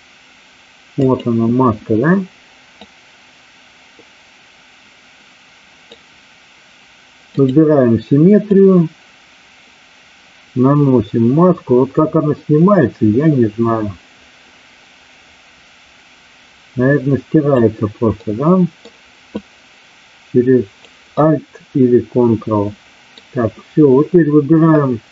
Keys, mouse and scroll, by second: 1.0 click, 2.7-5.9 drag, 7.3 click, 8.4-17.6 drag, 18.1 middle click, 19.3-20.9 drag, 21.1-23.0 middle drag.